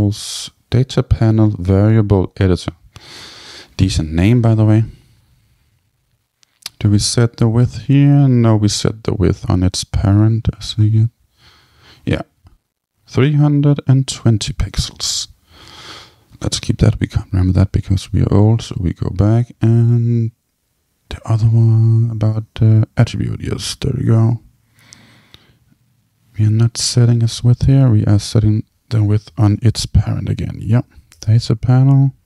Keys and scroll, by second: 15.5 super+c, 29.5 super+k, 30.7 Down, 31.2 Return.